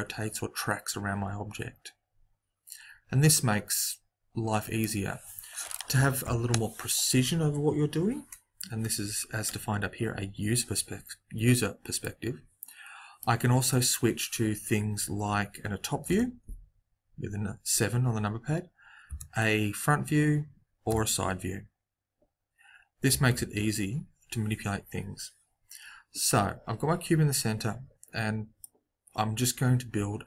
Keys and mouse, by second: 11.9-13.8 middle drag, 16.0 KP_7, 19.0 KP_1, 20.8 KP_3, 23.0 KP_3, 23.3 KP_1, 23.7 KP_7.